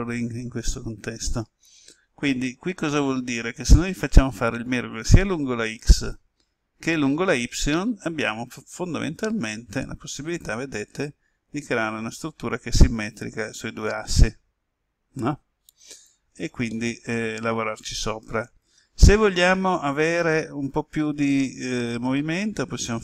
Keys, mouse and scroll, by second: 9.0 right click, 10.3 g, 15.8 click, 16.6-18.4 middle drag, 18.6 ctrl+z, 21.0-21.4 typing.